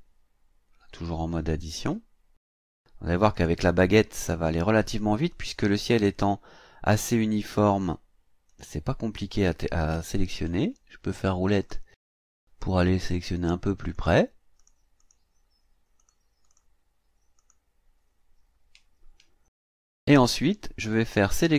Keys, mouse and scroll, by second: 0.9 click, 1.8 click, 2.6 click, 3.3 click, 4.7 click, 5.3 click, 6.1 click, 8.5 click, 10.2-10.7 ctrl+scroll up 2, 11.6 click, 13.0 click, 13.9 click, 14.6 click, 15.0 click, 16.0 click, 16.5 click, 17.4 click, 19.1 ctrl+scroll down 2, 20.3 ctrl+scroll down 2.